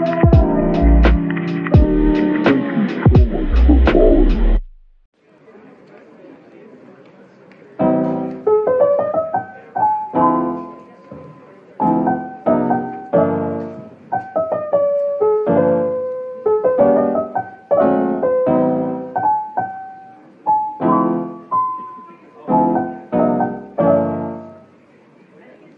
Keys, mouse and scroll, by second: 2.0 ctrl+z, 5.9-6.2 typing, 9.5 typing.